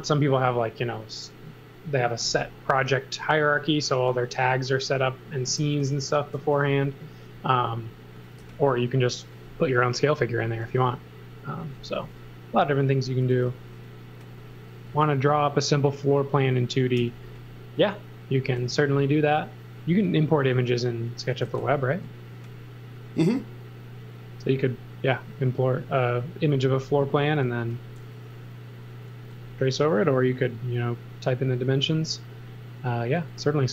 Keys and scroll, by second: 5.5 n, 7.9-8.9 typing, 10.8 n, 13.0-14.9 typing, 17.0 n, 18.5 space, 21.4 z, 21.9 space, 22.9 space.